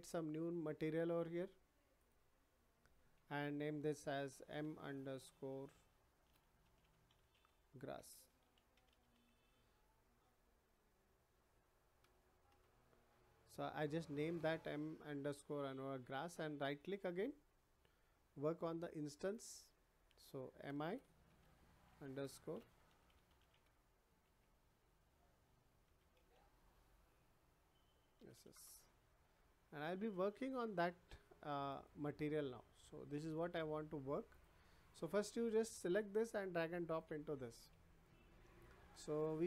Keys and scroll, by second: 4.5 shift+m, 5.1 shift+-, 6.2 shift+a, 6.6 n, 6.7 u, 9.1 \, 12.0 BackSpace, 12.5 Return, 20.9-22.9 typing, 25.8 r, 28.2 s, 28.5 Return.